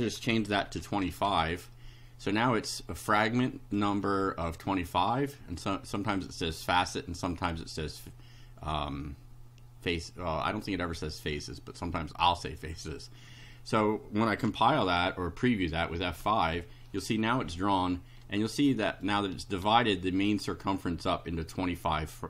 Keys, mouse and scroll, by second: 0.7 Home, 1.1 Delete, 3.4 click, 4.1 click, 4.6 click, 5.6-6.7 drag, 10.7 click, 11.8 scroll down 2, 12.5 scroll up 1, 13.1 scroll down 1, 16.2 F5, 17.7-18.4 scroll up 4, 19.1 shift+right click.